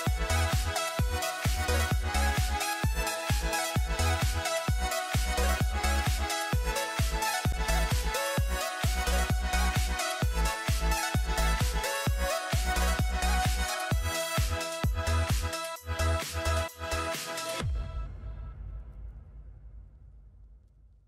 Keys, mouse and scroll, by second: 4.9 double click, 5.2 ctrl+t, 6.2 shift+click, 9.1 shift+click, 13.6 Return.